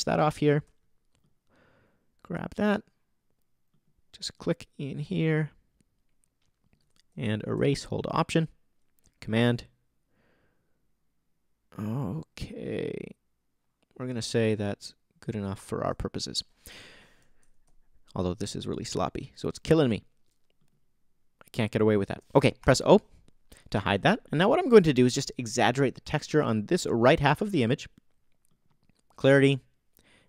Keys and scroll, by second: 22.6 super+o, 23.3 o.